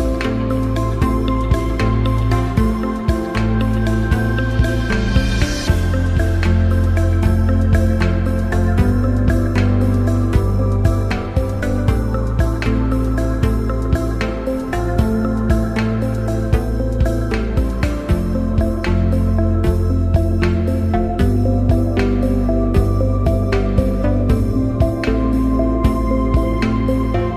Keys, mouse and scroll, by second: 3.6 click, 3.8-8.0 drag, 9.6 click, 12.6 click, 15.1 click, 18.1-19.3 typing, 21.6-23.1 drag, 23.7 5, 25.8-27.3 drag.